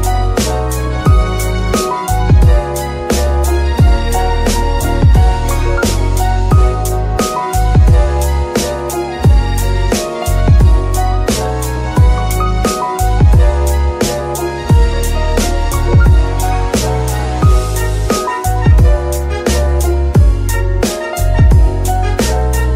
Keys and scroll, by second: 0.8 KP_3, 1.5 F2, 3.7 Left, 4.0-5.0 typing, 5.3 Return, 9.0 shift+d, 9.3 shift+y, 11.8 shift+g, 12.0 shift+y, 14.3 shift+g, 14.4 shift+y.